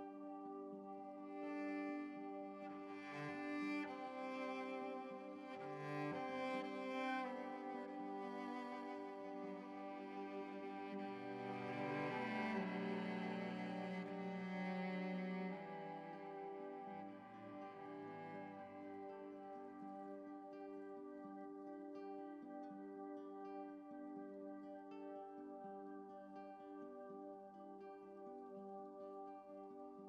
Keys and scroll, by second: 24.2 x.